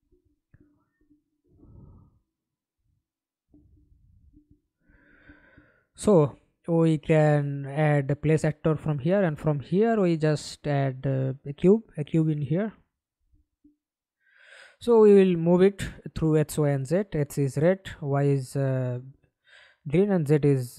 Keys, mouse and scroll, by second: 4.5 middle click, 12.7 f, 13.2-13.7 scroll down 5, 13.9 alt+click.